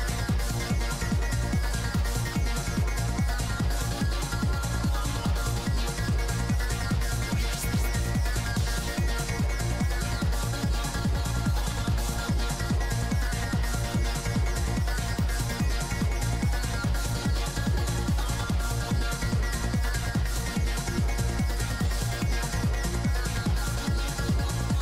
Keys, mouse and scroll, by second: 1.0 g, 1.0 f, 1.3-2.9 drag, 2.1 middle click, 2.1 right click, 2.9 ctrl+z, 3.1 middle click, 3.3-5.1 middle drag, 4.7-7.0 drag, 4.7 z, 5.1 z, 6.3 f, 6.9 right click, 7.1 click, 7.3 z, 7.7 middle click, 7.7 z, 8.3 middle click, 8.3 f, 8.6-9.7 drag, 8.6 right click, 9.5-11.2 middle drag, 9.9-11.3 drag, 11.2 f, 11.5 click, 12.0 click, 12.3-14.3 middle drag, 14.9 middle click, 15.7-16.7 drag, 16.4 f, 16.7 middle click, 17.1 f, 17.3-22.0 drag, 20.7 middle click, 22.2 middle click, 22.6-24.1 drag, 24.1-24.8 middle drag, 24.7 g.